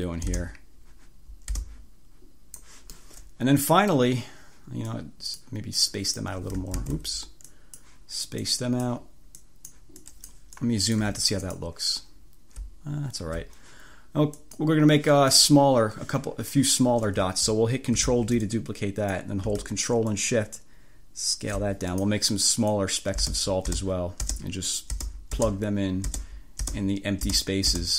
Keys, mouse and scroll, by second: 0.5 space, 1.7 space, 5.9 click, 6.9 ctrl+z, 7.6 click, 8.5 click, 9.5 click, 10.1 click, 10.7 click, 11.1 1, 11.5 click, 13.1-13.5 ctrl+scroll up 2, 14.5 click, 18.1 ctrl+d, 18.5 ctrl+click, 20.2-21.8 ctrl+shift+drag, 22.0 ctrl+shift+click, 23.3 space, 26.1 space.